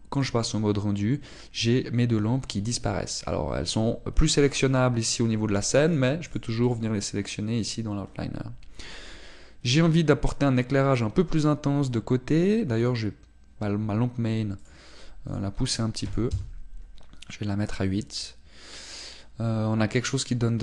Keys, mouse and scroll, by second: 0.5 click, 7.0 click, 7.3 click, 7.7 click, 8.1 click, 13.8 click, 17.3 click.